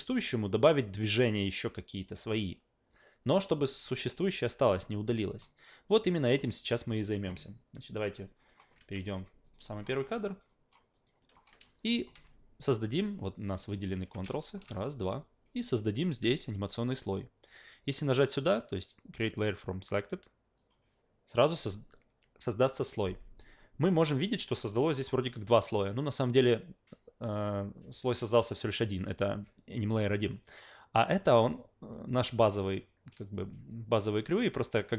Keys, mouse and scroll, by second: 7.9 click, 8.6 alt+middle drag, 8.8 f, 9.1 alt+right click, 9.4 alt+right click, 9.7 alt+drag, 10.0 alt+middle click, 10.3 alt+right click, 10.5 alt+drag, 10.9 alt+right click, 11.1 alt+middle drag, 11.4 alt+click, 13.8 click, 14.0 q, 14.5 shift+click, 20.6 click, 24.9 click, 25.5 click, 30.9 click.